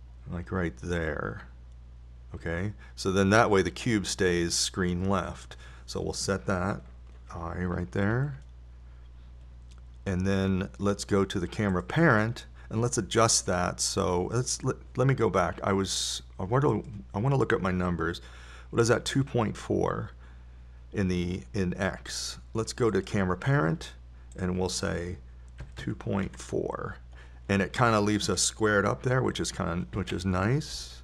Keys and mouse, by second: 1.0-3.5 drag, 9.6 i, 13.2-14.2 right drag.